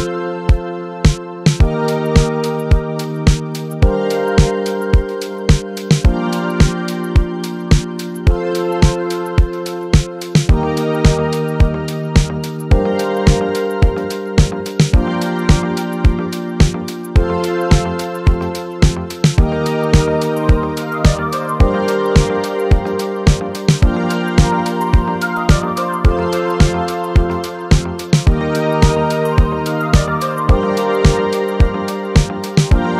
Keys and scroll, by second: 8.9 typing.